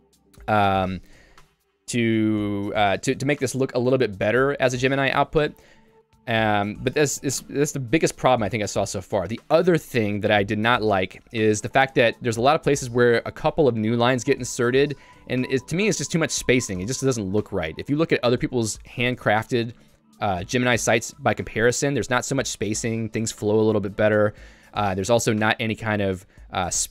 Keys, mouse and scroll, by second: 9.8 g, 10.7 Escape, 10.8 Escape, 11.2-14.5 typing, 14.3 Escape, 15.7-17.2 typing, 16.7 Escape, 21.5 j, 23.2 k, 26.2 ctrl+u, 26.5 ctrl+u.